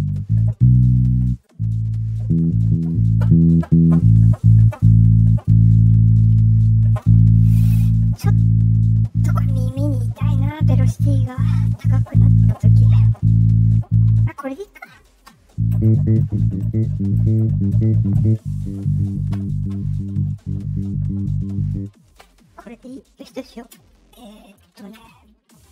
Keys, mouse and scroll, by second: 9.9-11.7 drag, 14.6 click, 23.1 middle click, 23.1 scroll down 1.